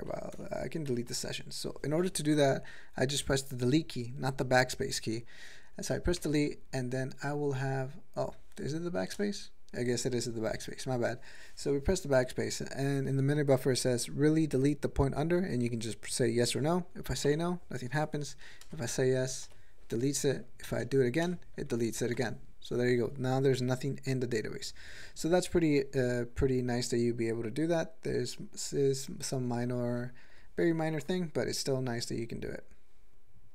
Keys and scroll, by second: 0.4 Return, 0.9 n, 1.1 n, 6.2 Delete, 9.1 BackSpace, 17.3 n, 18.7 BackSpace, 19.5 y, 21.3 BackSpace, 22.1 y, 30.1 ctrl+p, 30.2 ctrl+p, 30.3 ctrl+p, 30.7 ctrl+n, 33.1 Return.